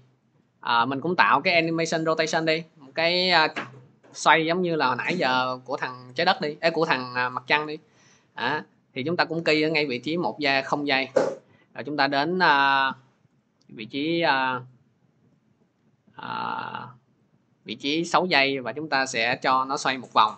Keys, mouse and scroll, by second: 0.2-5.2 drag, 9.2 click, 13.2 click, 15.3 click, 20.0 typing.